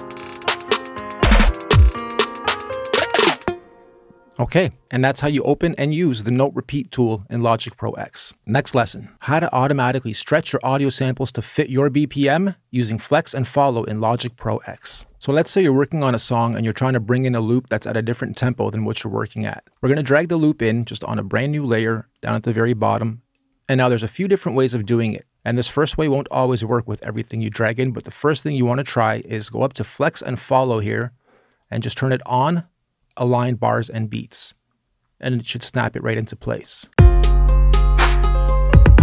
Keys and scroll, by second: 3.2 space, 36.7 space.